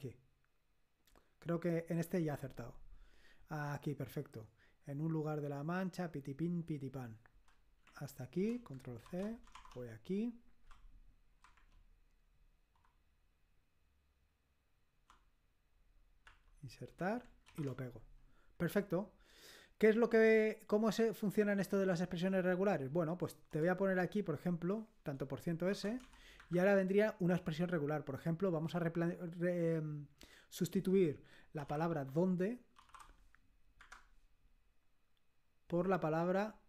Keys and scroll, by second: 11.7 1, 11.9 alt+Tab, 17.9 Insert, 17.9 ctrl+v, 22.1 Escape, 31.4-33.8 typing.